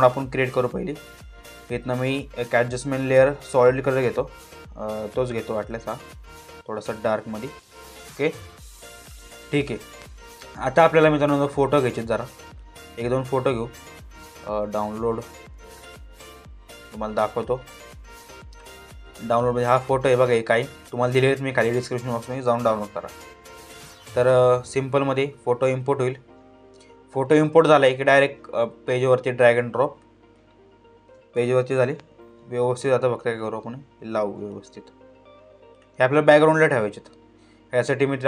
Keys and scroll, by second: 31.2 ctrl+t.